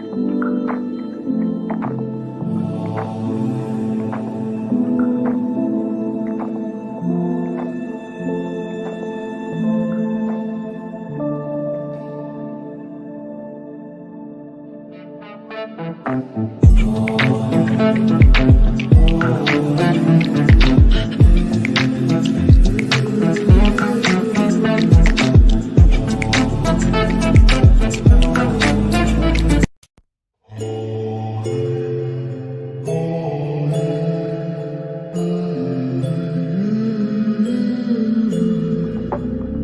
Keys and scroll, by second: 22.6 f, 36.8 shift+F2, 37.2 F3, 37.6 Escape.